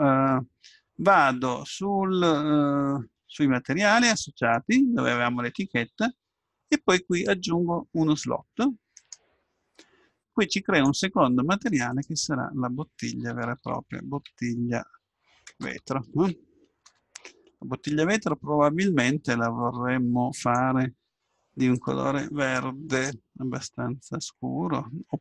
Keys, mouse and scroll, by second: 3.2-5.0 middle drag, 4.4-6.3 drag, 9.0-14.1 drag, 14.0 t, 20.4-24.8 drag.